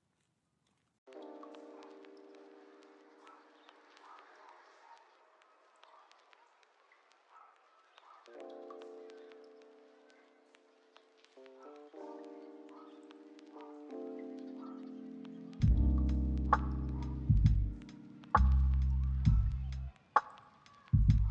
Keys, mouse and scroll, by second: 0.7 z, 5.1 g, 10.4 ctrl+click, 12.6 r, 13.4 ctrl+click, 13.8 ctrl+click, 14.4 ctrl+click, 18.8 g.